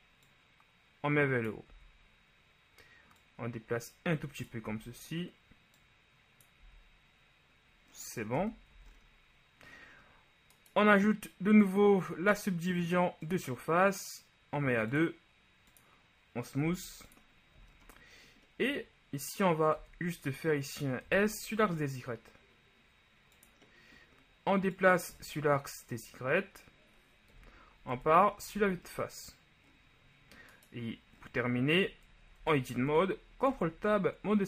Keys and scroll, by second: 1.9 z, 4.9 z, 8.5 Tab, 8.8 a, 16.8 w, 19.9 Tab, 21.2 s, 21.7 y, 27.6 KP_1, 28.1 Tab, 28.7 a, 32.5 ctrl+Tab, 33.6 ctrl+Tab.